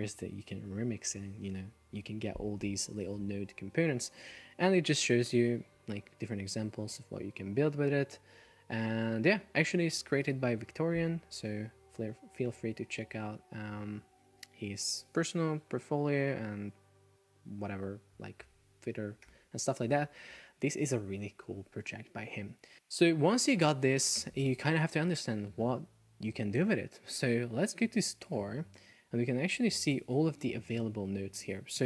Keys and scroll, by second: 19.3 super+w.